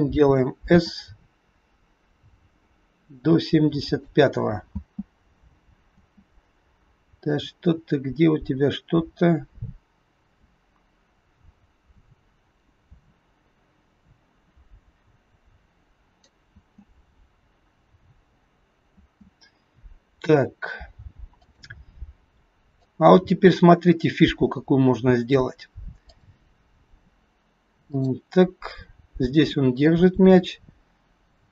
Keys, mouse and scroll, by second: 0.7 s, 4.7 space, 5.9 space, 7.4 click, 16.5 space, 18.2 scroll down 2, 19.1 space, 21.4 click, 22.8 click, 26.2 click, 27.9 click.